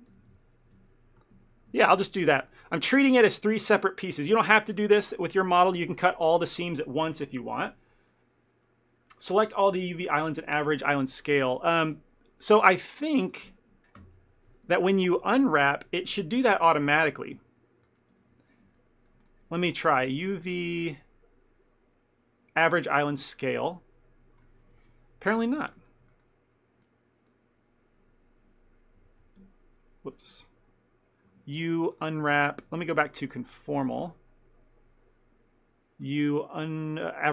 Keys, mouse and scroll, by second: 0.2 ctrl+l, 0.4 p, 1.5 Tab, 1.9 ctrl+middle click, 2.3 a, 2.6 middle click, 2.9 middle click, 3.0 ctrl+middle click, 11.3 click, 11.6 click, 13.1 shift+click, 14.1 ctrl+j, 14.8 Tab, 15.3 a, 16.9 u, 17.9 shift+middle click, 18.2 a, 18.4 a, 18.8 ctrl+middle click, 19.3 shift+middle click, 19.6 a, 20.8 click, 25.8 shift+middle click, 26.2 ctrl+middle click, 26.9 shift+middle click, 28.5 n, 29.1 n, 29.5 y, 30.6 ctrl+z, 31.4 u, 33.4 click, 36.1 click.